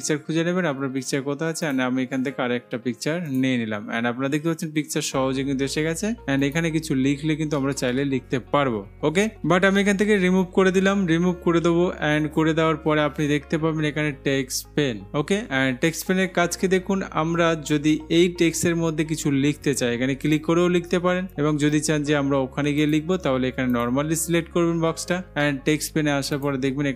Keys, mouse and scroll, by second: 0.0-1.0 drag, 1.9-2.9 drag, 3.5-4.5 drag, 6.7-7.7 drag, 7.8 typing, 9.8 ctrl+z, 20.5 click, 21.4 click, 23.1-25.0 drag, 26.6-26.9 drag.